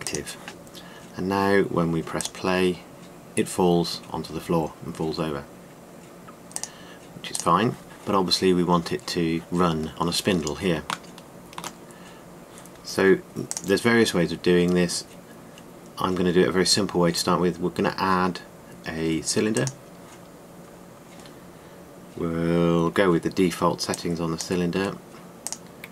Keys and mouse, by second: 1.3 middle click, 7.2-9.6 middle drag, 11.9-12.7 middle drag, 12.8-14.1 middle drag, 21.1 middle click, 24.6-25.1 drag.